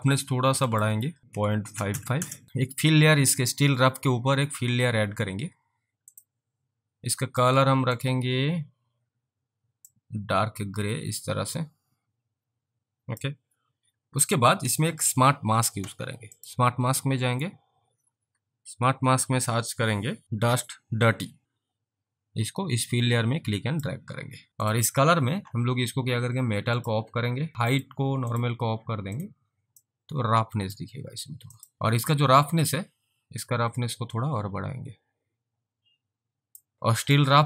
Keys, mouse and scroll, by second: 0.6-2.4 typing, 0.8 click, 6.2 click, 7.9 click, 10.0 click, 16.4 click, 21.4 click, 24.5 alt+click, 26.8 click, 27.8 click, 29.9 alt+click, 34.2 click, 36.7 alt+click, 37.0 alt+click.